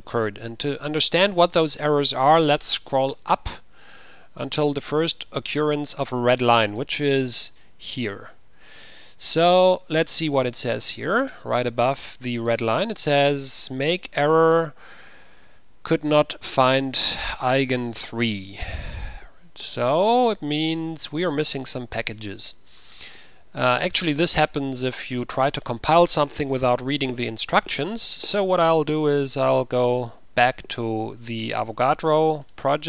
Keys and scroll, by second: 29.3 ctrl+c.